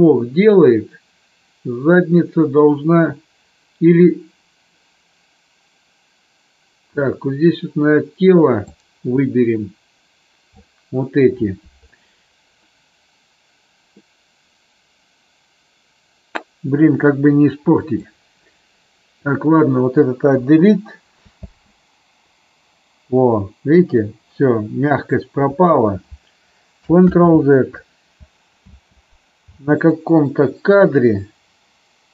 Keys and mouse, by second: 8.7-10.5 drag, 17.9-19.1 drag, 20.3 Delete, 21.4 space, 25.5 space, 27.0 ctrl+z, 28.5 space.